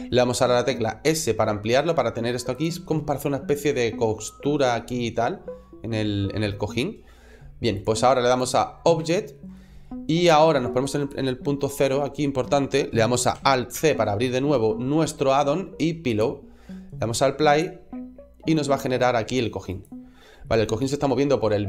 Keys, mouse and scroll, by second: 0.9 s, 2.4 click, 2.7 middle click, 4.2 scroll down 2, 4.6 middle click, 5.1 middle click, 7.6 click, 8.9 shift+middle click, 9.4 middle click, 10.8 click, 12.0 scroll up 1, 13.6 alt+c, 17.4 click, 19.7 click, 20.3 middle click, 21.5 middle click.